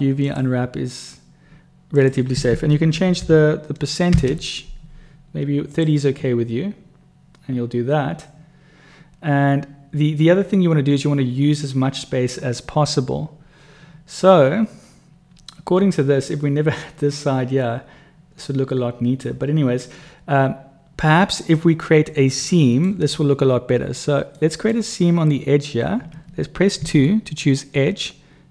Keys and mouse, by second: 22.4 middle click, 24.4 click, 24.4 right click, 26.8 2.